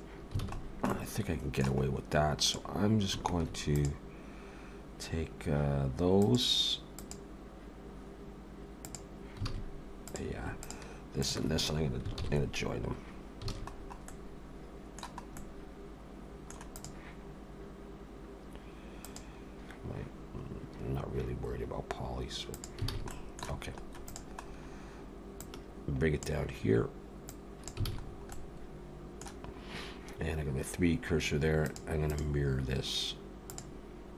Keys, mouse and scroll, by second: 0.4 alt+a, 0.6 scroll down 2, 0.9 middle click, 1.9-2.2 scroll up 1, 2.4 click, 2.4 scroll up 1, 3.7 click, 6.2 click, 7.0 click, 8.9 click, 9.5 alt+a, 10.0 click, 10.6-11.0 shift+click, 12.1 ctrl+j, 13.5 alt+a, 13.7-14.2 scroll down 4, 14.1 middle click, 15.4 middle click, 16.8 click, 19.0 click, 22.5 click, 22.9 alt+a, 23.1 middle click, 24.1 click, 24.4-25.1 scroll down 1, 25.4 click, 25.4-25.9 scroll down 2, 27.3 click, 27.9 alt+a, 28.0-28.8 scroll down 3, 28.3 middle click, 31.7 click, 32.1 click.